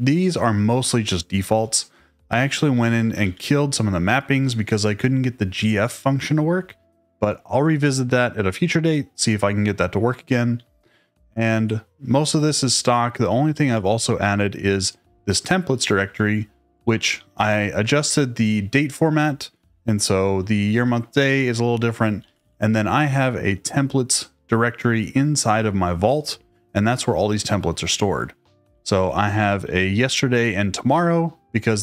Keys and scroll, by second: 1.8-4.0 typing, 4.0 Escape, 5.2 ↻, 10.5 ctrl+d, 12.6-13.6 typing, 16.8-17.9 typing, 19.6 Escape, 20.3-22.8 typing, 23.1 Escape, 28.6-30.8 typing.